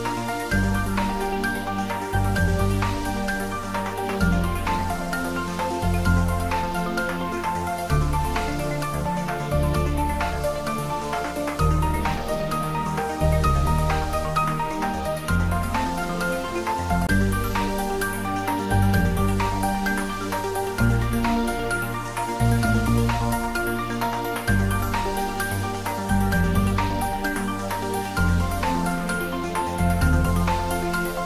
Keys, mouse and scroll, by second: 0.2 y, 0.8 Right, 5.0 space, 7.1-12.2 middle drag, 15.4 click, 19.8-20.8 typing, 24.4 click, 25.3 g, 27.7 click, 29.9-31.2 middle drag.